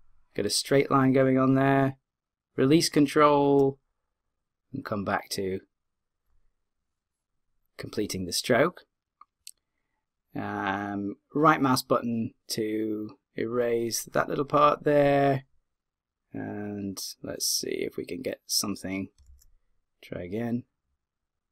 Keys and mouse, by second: 19.3 z.